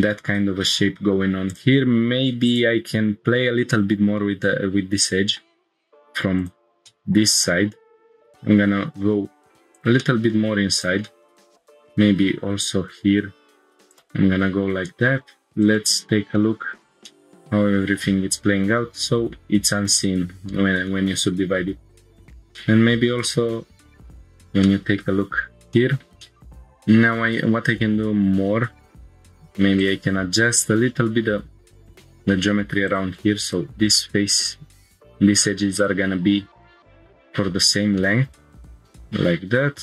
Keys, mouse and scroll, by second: 0.3-0.7 scroll up 1, 1.5 click, 3.0 click, 4.2-5.4 middle drag, 5.8 1, 6.4 click, 6.8 middle click, 8.1 g, 8.4 y, 9.7 click, 10.0 middle click, 10.7 click, 11.0 middle click, 12.0 g, 12.2 y, 12.7 y, 13.9 click, 14.2 Tab, 15.6 click, 16.1 scroll down 1, 16.4-17.0 middle drag, 17.1-19.4 middle drag, 20.0-20.4 middle drag, 20.4 Tab, 20.9 middle click, 21.9 click, 22.2 Tab, 22.2 scroll down 2, 22.5 middle drag, 22.8-23.3 drag, 23.3-24.1 middle drag, 24.1 scroll up 2, 24.3 Tab, 24.6-25.0 middle drag, 25.2 scroll up 2, 25.8-26.1 shift+middle drag, 26.2 middle click, 26.4-27.4 drag, 26.4 scroll up 1, 29.8 ctrl+click, 30.6 g, 31.7 click, 31.7 g, 32.6 2, 32.9-33.2 drag, 33.9 right click, 36.9 shift+middle click, 36.9 scroll down 2, 37.5 scroll up 1, 38.0-38.3 middle drag, 38.6 scroll up 1, 39.2 scroll up 2.